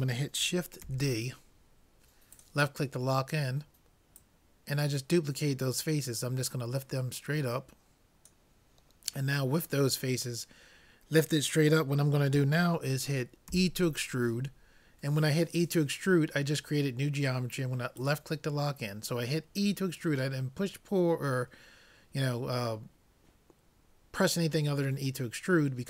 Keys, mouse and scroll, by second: 0.9 shift+d, 4.2-6.1 drag, 9.5-12.1 middle drag, 13.6 e.